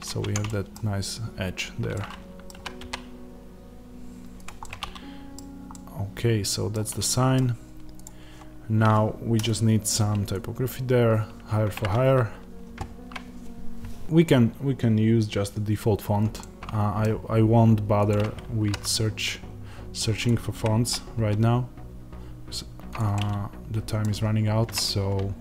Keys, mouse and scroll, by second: 0.0 Tab, 0.4-4.3 middle drag, 2.4 g, 4.3 click, 4.5-7.9 middle drag, 5.3-5.6 scroll, 6.6-7.0 scroll, 7.9 click, 11.7 click, 16.4-18.0 middle drag, 18.0 click, 18.6 g, 20.1 click, 20.5 g, 22.9 click, 23.0-25.4 middle drag.